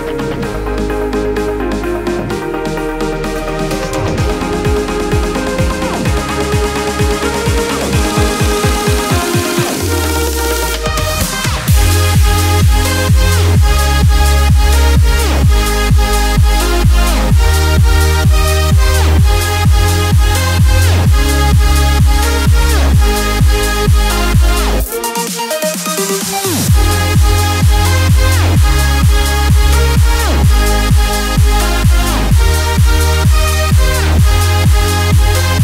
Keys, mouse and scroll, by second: 0.2 click, 2.0 b, 2.6 b, 2.8 alt+right click, 3.7 alt+scroll up 1, 4.5-5.9 alt+right drag, 5.9 click, 5.9 click, 12.1 ctrl+alt+shift+e, 15.7 click, 22.5 click, 25.3-33.1 drag, 33.1-35.6 drag.